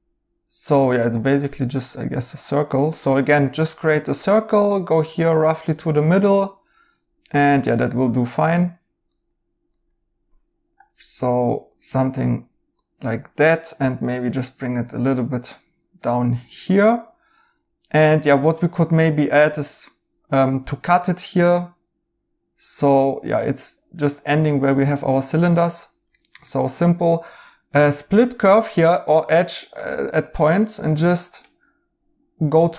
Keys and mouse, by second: 9.0 right click, 13.8 g, 26.1 right click, 32.6 right click.